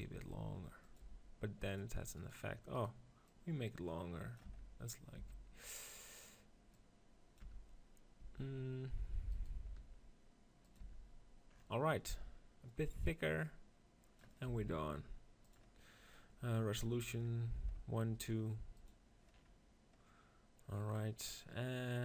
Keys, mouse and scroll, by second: 0.0 g, 0.8 right click, 1.2 r, 2.0-4.7 right drag, 4.4 Tab, 4.7 click, 5.1 Tab, 5.7-7.6 right drag, 6.6-8.4 drag, 8.1 Tab, 9.2-10.8 drag, 9.6 r, 10.6 right click, 10.8 Tab, 11.2-14.8 drag, 14.4 s, 15.4-20.4 drag, 20.4 middle click.